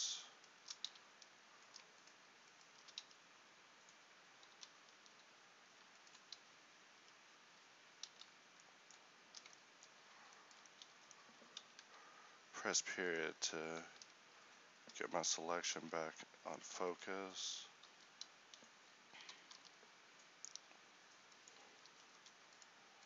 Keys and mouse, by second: 4.6 ctrl+r, 7.1 f, 8.1 ctrl+z, 13.9 z, 15.8 c, 18.0 z, 19.3 e, 22.1 ctrl+r.